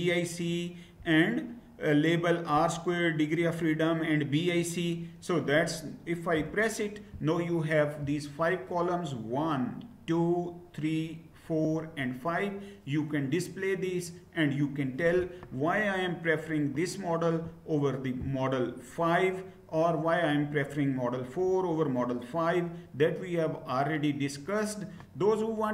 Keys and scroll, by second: 6.0 Return.